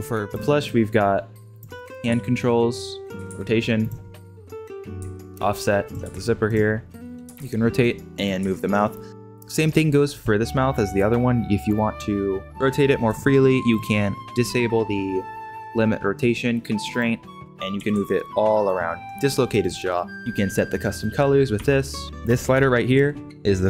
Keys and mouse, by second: 0.2 click, 1.7 click, 2.0 g, 3.1 g, 3.1 r, 4.7 click, 4.9 g, 6.0 r, 7.2 g, 7.3 r, 8.3 g, 12.4 r, 13.7 click, 16.9 click, 17.7 r, 20.1-20.8 shift+middle drag, 21.5 g, 22.0 alt+r, 22.0 alt+g, 22.0 a, 22.3 middle click, 22.6-23.0 shift+middle drag.